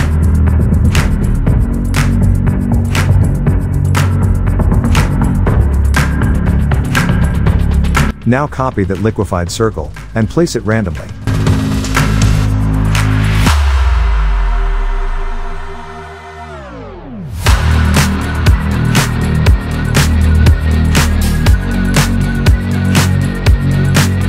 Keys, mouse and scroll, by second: 0.3 alt+click, 1.4 click, 1.8 shift+click, 2.5 ctrl+t, 3.1-5.4 drag, 12.4 ctrl+j, 13.5-15.3 drag, 17.3 ctrl+t, 18.0-20.3 drag, 23.1 shift+click.